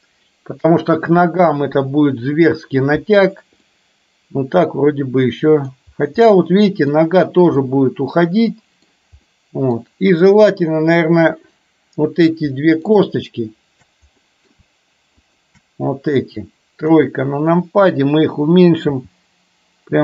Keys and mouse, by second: 3.8-5.8 middle drag, 6.3 middle click, 7.7-8.9 middle drag, 9.3 middle click, 10.8 click, 12.5 middle click, 14.2 middle click, 15.3 shift+click, 16.9 KP_3, 19.0 g.